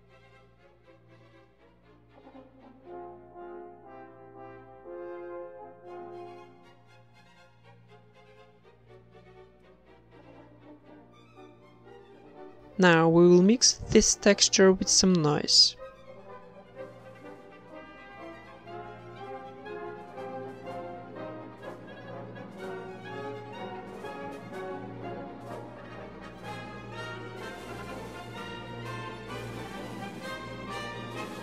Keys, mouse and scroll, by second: 0.3 g, 0.9 Tab, 3.3 KP_0, 3.6 z, 4.1 ctrl+s, 5.3-6.2 drag, 5.9-6.2 right drag, 6.2-6.9 middle drag, 6.5 shift+a, 8.6-10.2 drag, 10.0 right click, 10.2 middle click, 11.7 click, 12.1 right click, 12.6 middle click, 12.7 a, 12.8 b, 13.0 g, 13.7 middle click, 13.8 g, 14.9-15.9 right drag, 15.0 g, 16.1-17.4 drag, 16.9 shift+d, 18.1 click, 19.1 click, 19.1 right click, 19.3 right click, 19.5 click, 20.8 click, 22.7 middle click, 23.1 click, 23.6 shift+a, 26.7-27.6 drag, 27.7-28.7 drag, 29.0-30.1 drag, 30.4 click.